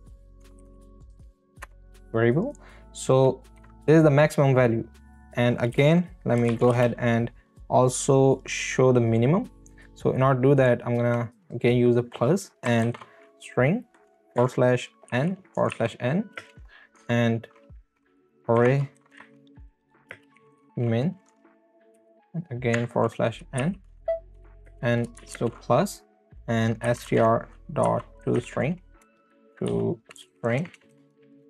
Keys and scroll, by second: 0.0-1.3 typing, 1.6 Return, 3.6 Right, 5.7 space, 6.7 space, 15.1 n, 16.3 space, 18.6-21.9 typing, 23.6 n, 24.3 Right, 24.7 space, 25.3 space, 26.6-28.2 typing, 29.0 Return, 29.8 Left, 30.2 BackSpace, 31.1 s, 31.4 Return.